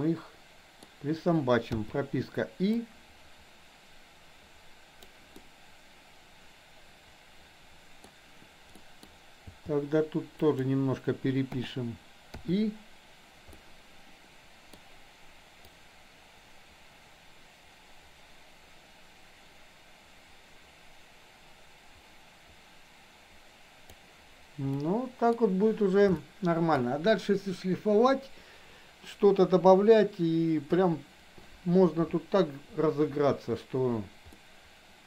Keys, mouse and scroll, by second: 1.8 i, 2.8-5.2 drag, 5.3-8.0 middle drag, 8.8 middle drag, 9.5 g, 11.4 o, 12.4 i, 13.5-14.7 middle drag, 15.8-23.9 drag, 24.8-25.4 middle drag, 26.3-26.8 shift+middle drag, 34.3-35.0 middle drag.